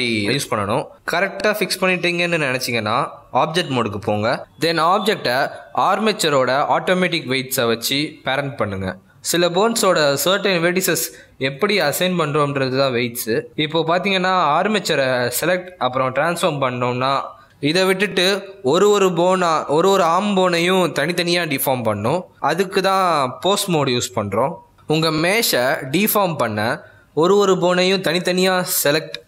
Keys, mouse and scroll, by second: 1.3 click, 3.3 middle click, 4.1 click, 5.2 shift+click, 6.9 ctrl+p, 10.4 click, 10.9 click, 11.5 middle click, 12.1 z, 12.8 z, 13.1 middle click, 13.5 r, 16.8 middle click, 17.1 scroll down 1, 17.2 middle click, 17.8 r, 18.5 middle click, 19.5 click, 22.0-22.5 scroll up 1, 22.5 z, 23.2 middle click, 23.8 shift+middle click, 24.1-24.5 scroll down 1, 24.5 shift+middle click, 25.3 click, 25.9 middle click, 26.4 r, 27.7 middle click, 28.7 click, 29.0 middle click.